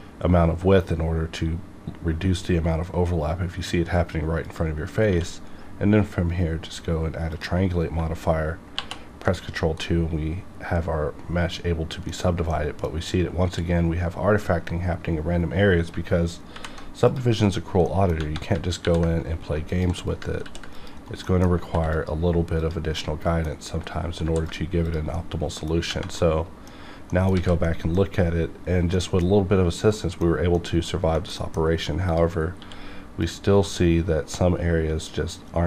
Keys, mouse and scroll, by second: 4.4 click, 5.1 q, 7.3 click, 8.7 ctrl+2, 9.8-12.5 middle drag, 12.5-15.3 middle drag, 16.5 alt+v, 17.1 click, 17.8 middle click, 18.8 ctrl+r, 19.7 click, 20.0 right click, 20.4 ctrl+r, 20.7 click, 21.0 right click, 21.2 middle click, 21.7 ctrl+r, 21.9 ctrl+click, 22.6 click, 23.0 middle click, 23.5 scroll down 1, 24.2 ctrl+r, 24.4 ctrl+click, 24.8 click, 25.1 middle click, 26.2 middle click, 26.8-27.1 scroll up 1, 27.1 middle click, 27.3 alt+a, 27.6 middle click, 31.4 middle click, 31.6 scroll up 1, 32.1 click, 32.6 q, 33.2 click, 35.0 scroll up 1.